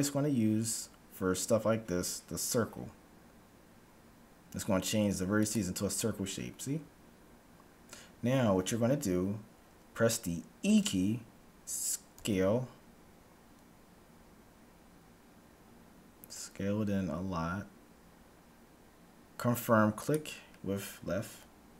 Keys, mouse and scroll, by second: 10.8 e.